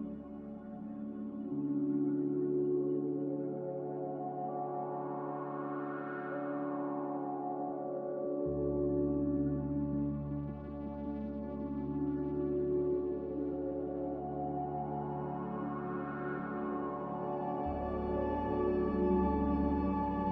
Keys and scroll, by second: 16.6 typing, 17.0 Return.